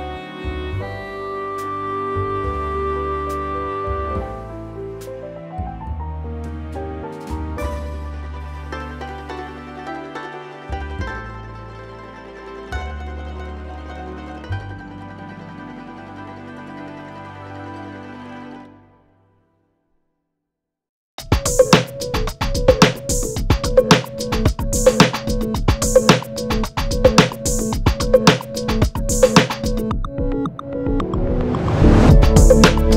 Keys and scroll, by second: 1.2 5, 9.6 5, 11.7 Escape, 12.0-12.7 typing, 16.7-18.1 typing, 22.3-23.4 typing.